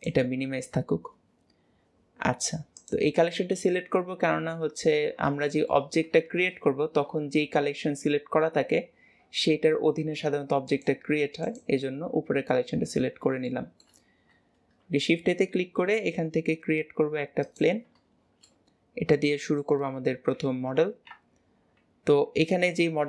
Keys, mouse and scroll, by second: 2.7 click, 5.5-6.3 shift+middle drag, 6.3 shift+a, 10.7 click, 11.5 click, 13.5-14.8 shift+middle drag, 14.8 shift+a, 18.5-20.7 middle drag, 20.7 KP_7, 22.2 KP_Decimal.